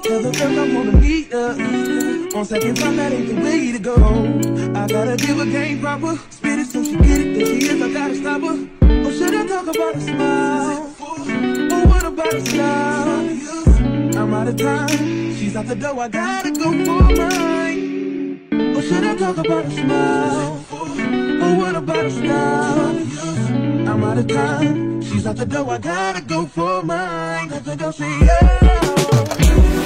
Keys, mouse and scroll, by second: 1.0 shift+middle click, 1.8-3.3 drag, 3.3-9.7 middle drag, 8.6 a, 9.7-12.1 drag, 12.1-14.9 drag, 14.9-21.5 middle drag, 15.9 n, 21.5-29.8 drag.